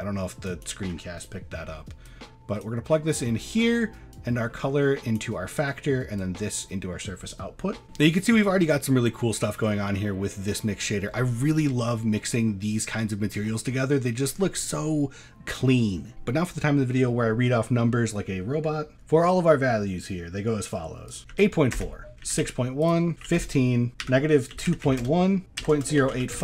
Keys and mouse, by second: 0.0 middle click, 0.5 click, 1.1 middle click, 2.1-2.6 drag, 3.2 middle click, 4.1-5.2 drag, 5.5 middle click, 6.3-7.4 drag, 9.1-9.5 middle drag, 9.5-10.9 middle drag, 13.8 middle click, 21.1 click, 22.1 click, 23.1 click, 23.9-25.1 drag, 25.4 click.